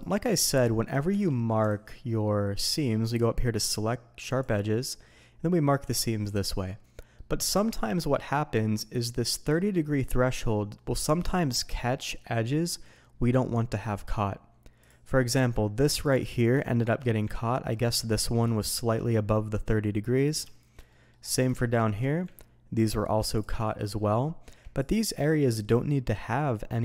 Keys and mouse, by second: 0.6 shift+drag, 1.1 Tab, 1.6 alt+a, 3.1-4.4 drag, 7.2 middle click, 7.6 shift+click, 8.1 middle click, 10.7 middle click, 11.2 shift+middle click, 13.5 middle click, 14.8 click, 15.2 middle click, 16.6 shift+click, 17.3 ctrl+middle click, 18.5 shift+middle click, 20.0 middle drag, 20.5 shift+middle click, 20.9 middle click, 21.5-21.9 shift+middle drag, 22.3-22.8 ctrl+middle drag, 23.3 drag, 23.6 shift+middle click, 24.8 click.